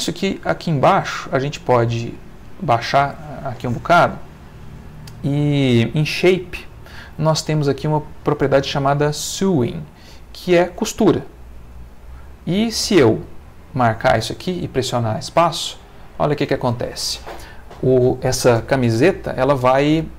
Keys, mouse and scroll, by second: 0.9-2.0 middle drag, 2.1-3.1 middle drag, 6.3 click, 11.6 click, 15.3 space.